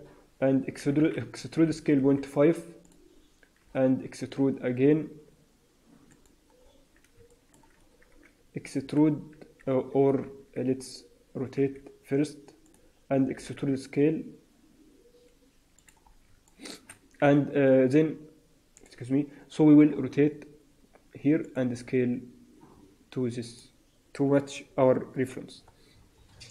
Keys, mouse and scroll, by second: 0.7 e, 3.5 e, 6.5-7.1 scroll down 6, 7.2 shift+middle click, 7.6-8.7 scroll up 1, 8.7-9.6 scroll up 2, 8.7 e, 10.2 ctrl+z, 10.6-11.5 scroll up 2, 11.5 r, 13.2 e, 16.0 scroll down 3, 16.4 shift+middle click, 17.1 e, 19.6 r, 21.7 s, 25.8-26.5 scroll down 7.